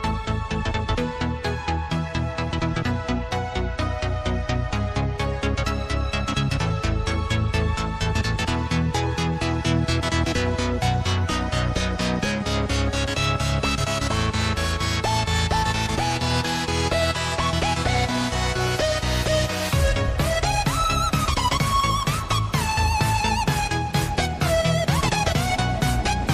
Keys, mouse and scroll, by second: 1.5 click, 2.5 click, 3.3 click, 3.8 s, 7.5 click, 8.1 scroll, 9.6 click, 13.0 click, 22.1 click, 23.5 click.